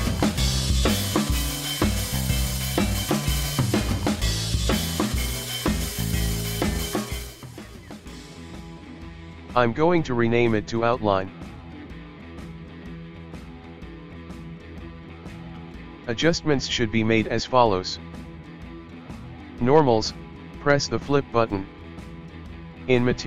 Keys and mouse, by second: 2.3-10.0 drag, 19.0-21.7 drag.